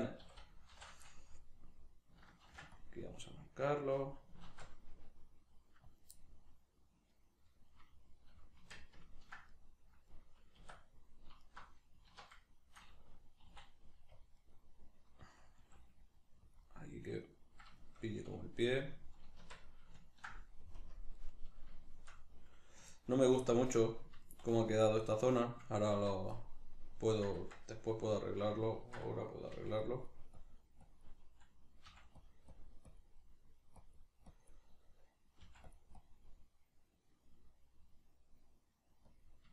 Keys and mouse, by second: 0.2 a, 0.7 shift+n, 1.3-4.1 middle drag, 2.5 ctrl+r, 4.1 click, 4.5 ctrl+r, 6.0 click, 6.2-11.4 middle drag, 8.6 Tab, 10.6 Tab, 11.4 alt+right click, 12.1 alt+q, 12.5-14.1 shift+middle drag, 13.5 e, 14.3 click, 14.4-29.9 middle drag, 15.6 s, 16.6 click, 19.4 Tab, 20.8 KP_Decimal, 25.9 Tab, 27.4 Tab, 29.5 g, 29.9-32.3 drag, 31.9 f, 33.2 middle click, 33.8 click, 34.7-35.7 middle drag, 35.4 f, 35.7 click, 36.5-39.1 middle drag, 39.1 click.